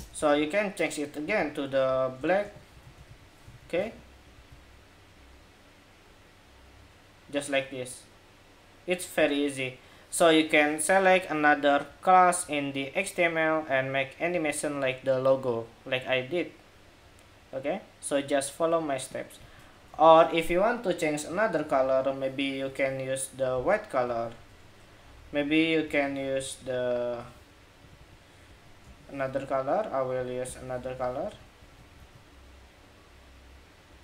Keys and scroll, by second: 3.2 super+s, 3.5 super+Tab, 4.2 super+r, 19.7 super+Tab, 31.0 super+s, 31.5 super+Tab, 31.7 super+r, 33.9 super+Tab.